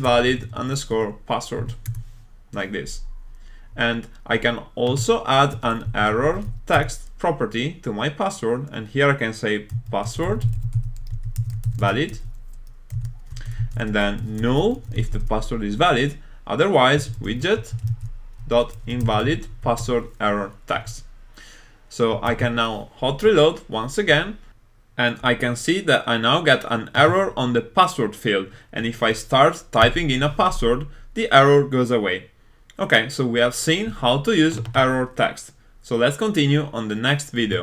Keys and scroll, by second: 1.9 Return, 6.8 Return, 19.9 Return, 22.5 super+s.